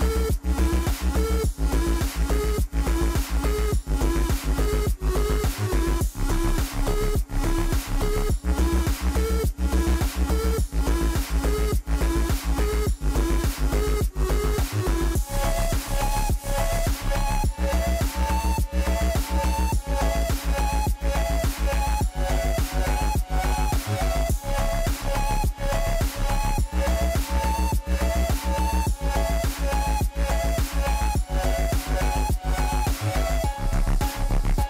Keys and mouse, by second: 0.0 click, 0.7 n, 11.4 shift+z, 12.1 Tab, 13.8-15.7 middle drag, 16.2 Tab, 17.7 click, 18.4 click, 20.4 click, 21.2 ctrl+z, 22.2 click, 22.9 Tab, 23.4 click, 24.7 g, 27.7-29.1 shift+middle drag, 29.9 Tab, 34.2 alt+shift+click.